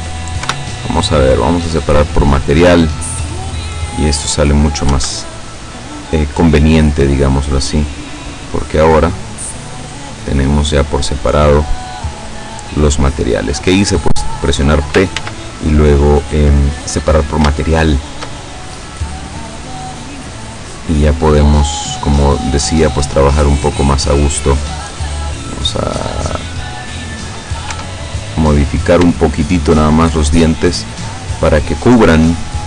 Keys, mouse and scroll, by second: 0.6 p, 1.6 click, 3.2-4.4 middle drag, 5.0 Tab, 5.5 right click, 6.7-7.4 scroll down 2, 8.0-11.1 drag, 11.2 scroll down 1, 11.8-14.2 middle drag, 14.4-14.7 scroll up 1, 15.2 ctrl+z, 16.1 middle click, 17.2 scroll up 2, 17.7 shift+middle click, 19.4-21.0 middle drag, 22.7 right click, 24.8-27.2 drag, 27.8 Tab, 28.7-29.1 scroll up 2, 29.2-30.2 shift+middle drag, 31.1 right click, 31.6 middle click, 32.2-32.6 drag.